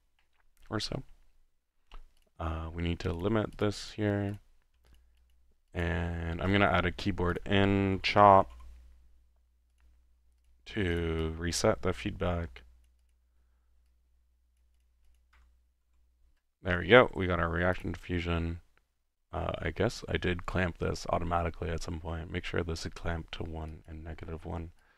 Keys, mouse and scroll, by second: 2.3 click, 3.2 click, 3.5 click, 3.9 click, 4.3 drag, 4.9-5.6 drag, 5.7-6.5 drag, 6.5 Tab, 7.3-7.6 drag, 7.7-9.1 typing, 9.7 drag, 10.4 click, 10.6 click, 11.0 click, 12.9 click, 13.9 click, 15.0 click, 15.1-15.9 typing, 17.8-18.2 drag, 23.7-24.3 drag, 24.8 click.